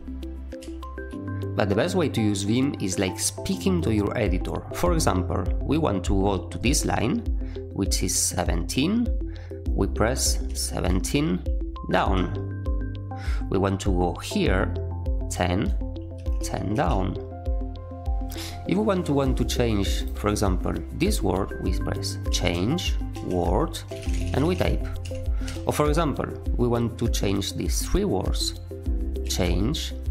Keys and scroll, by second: 10.4 1, 10.8 7, 11.9 j, 15.8-17.2 typing, 22.2-25.4 typing, 24.9 Escape, 29.2 c.